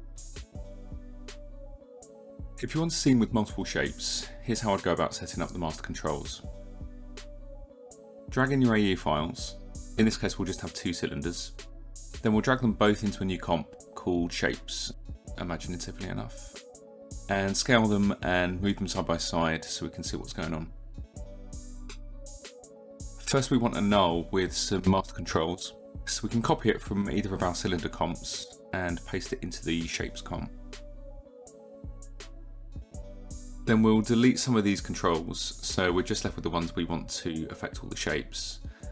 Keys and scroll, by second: 16.5 s, 19.0 -, 28.6 ctrl+c, 30.4 ctrl+v.